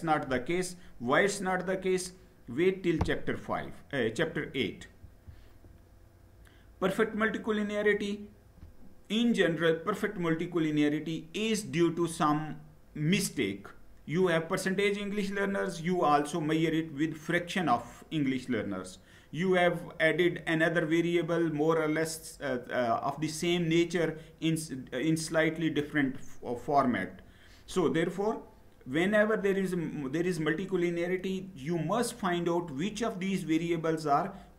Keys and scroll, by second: 4.9 Down.